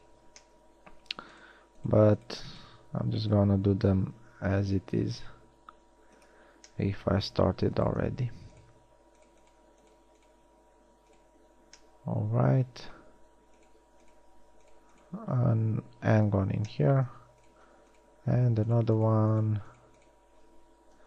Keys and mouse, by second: 0.2 f, 4.6 x, 9.4 shift+right click, 16.4 f.